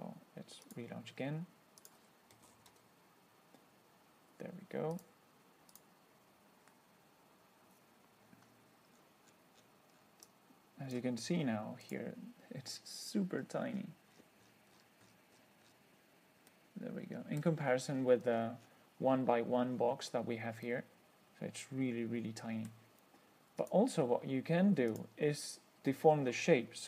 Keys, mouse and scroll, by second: 0.9 click, 2.1 click, 2.4-3.5 typing, 5.2 click, 6.0 click, 9.2-10.5 scroll down 8, 10.5-11.4 drag, 12.1 click, 13.2-15.3 scroll up 7, 15.3-15.9 scroll up 1, 15.9 scroll up 1, 16.8-17.9 middle drag, 18.0 scroll up 1, 18.2-19.1 scroll down 4, 20.0-20.6 scroll down 2, 20.9-23.1 middle drag, 23.9 click, 25.2 click.